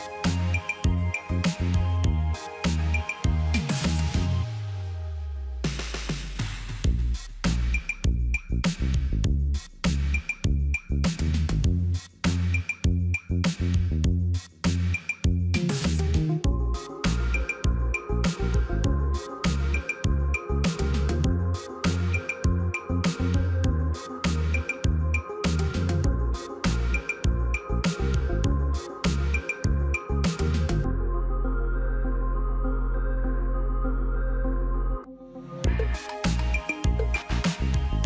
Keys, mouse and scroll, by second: 6.7 right click, 24.7 ctrl+v, 27.8 ctrl+a, 36.6 2, 37.4 Return.